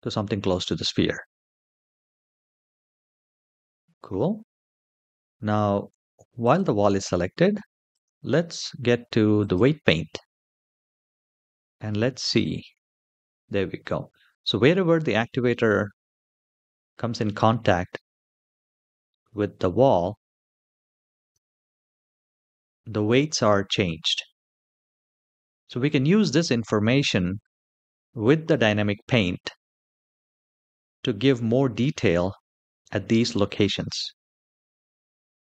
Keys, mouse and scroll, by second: 0.0-0.9 scroll down 4, 2.2-3.3 scroll up 2, 3.3-5.4 scroll up 1, 6.1 click, 7.6-9.4 drag, 10.8 shift+middle click, 11.3-12.0 scroll up 1, 12.0 space, 15.2-16.4 scroll up 2, 21.1 space, 21.8-22.9 middle drag, 23.5 shift+middle click, 35.2 click.